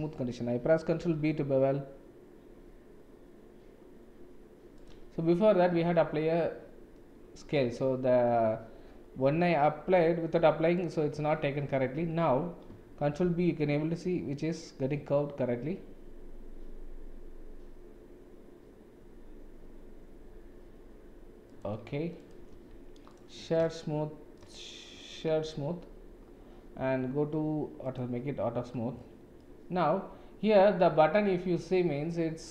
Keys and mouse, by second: 1.0 ctrl+b, 5.7 Tab, 9.9 ctrl+a, 12.0 Tab, 13.2 ctrl+b, 22.2 click, 22.5 Tab, 23.1 right click, 27.8 click, 29.4-31.6 middle drag.